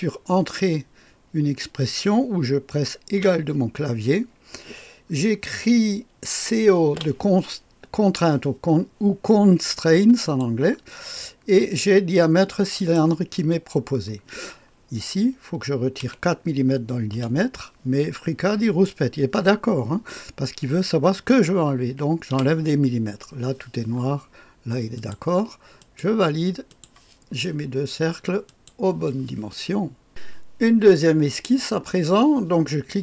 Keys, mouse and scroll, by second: 3.2 ≡, 3.4 =, 6.5-7.4 typing, 10.2 click, 12.8 click, 13.4 click, 16.0 -, 17.1 KP_4, 21.8-22.3 typing, 24.9 click, 26.0 click, 26.9 click, 28.7 click, 30.1 click.